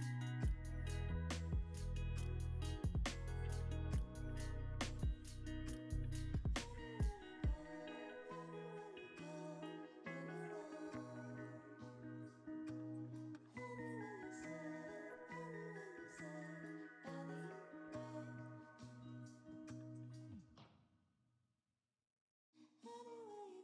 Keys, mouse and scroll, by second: 1.7 g, 1.9 x, 3.2 y, 6.4 x, 10.2-11.7 shift+drag, 12.2 alt+click, 12.7 alt+d, 14.6 r, 16.6 z, 18.0 ctrl+z, 18.5-20.2 typing, 20.7 Return, 21.4 scroll down 1, 21.8 g, 23.3 y.